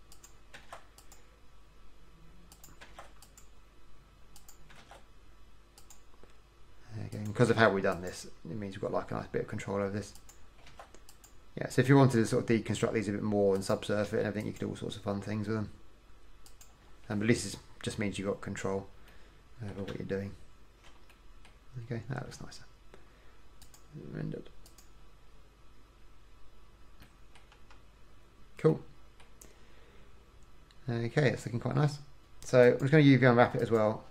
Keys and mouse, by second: 0.8 ctrl+r, 3.1 ctrl+r, 5.0 ctrl+r, 7.7 ctrl+r, 10.9 ctrl+r, 14.2 ctrl+r, 17.9 middle click, 20.1 Tab, 27.3 middle click, 27.5 middle click, 27.8 KP_1, 32.8-33.9 drag.